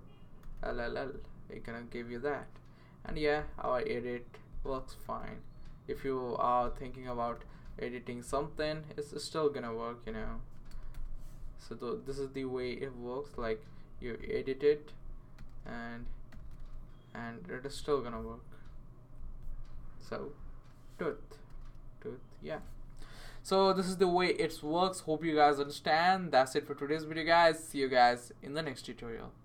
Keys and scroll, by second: 0.4 typing, 4.5-5.5 typing, 7.0-7.8 typing, 10.9 BackSpace, 15.1-17.1 typing, 21.0-22.1 typing.